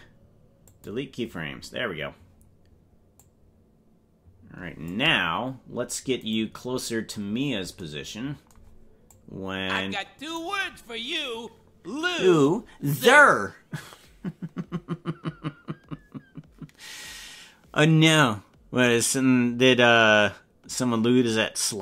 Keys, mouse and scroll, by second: 3.2-5.0 drag, 6.2 right click, 9.1-10.4 drag.